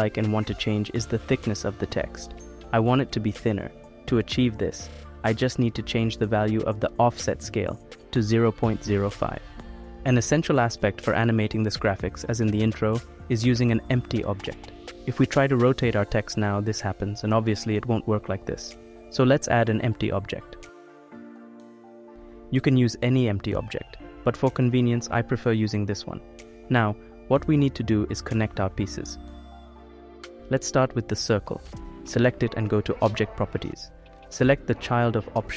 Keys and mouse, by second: 0.4 middle click, 0.7 click, 2.7 click, 3.6 click, 6.4-11.0 drag, 12.4 click, 13.2 click, 13.3 right click, 14.0 click, 14.7 click, 15.5 click, 17.1-19.9 drag, 20.5 ctrl+z, 20.6 shift+a, 24.9 s, 28.5-30.3 middle drag, 32.9-34.5 drag, 35.0 click.